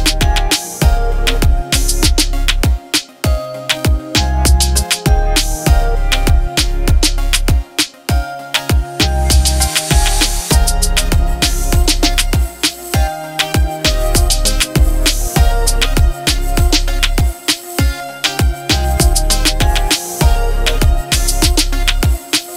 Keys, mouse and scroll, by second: 0.6-1.5 alt+drag, 1.8 alt+click, 5.2 t, 6.1 shift+h, 7.2-10.1 typing, 11.3 click, 12.4 ctrl+t, 14.4-15.7 alt+Num_Lock, 14.4-22.5 drag.